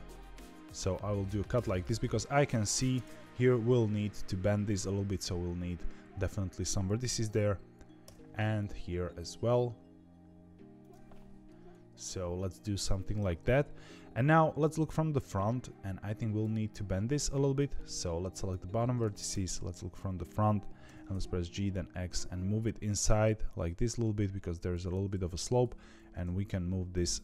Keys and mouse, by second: 8.0 k, 15.1-19.2 drag, 19.2 KP_1, 20.8 g, 25.3 click, 25.9 g.